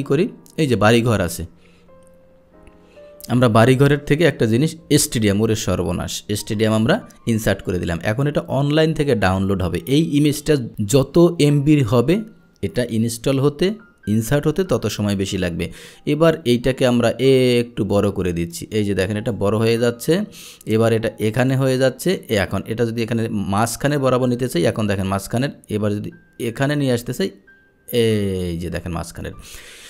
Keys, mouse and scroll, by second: 0.7 click, 5.2 click, 6.8 click, 17.0-18.0 drag, 18.6 click, 20.5-21.7 drag, 22.3-28.9 drag, 29.6 click.